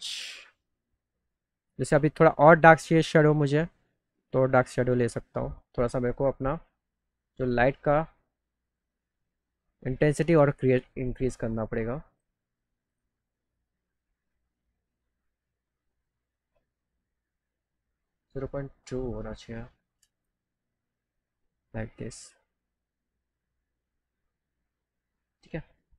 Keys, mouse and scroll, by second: 8.7-12.1 drag, 18.5 click, 20.0 KP_2, 20.2 KP_0.